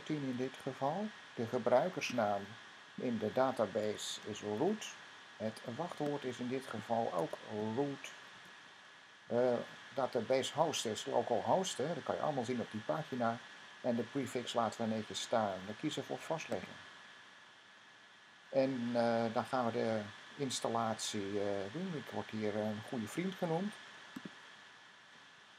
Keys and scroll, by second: 0.0-0.2 typing, 3.4-4.9 typing, 7.0-8.2 typing.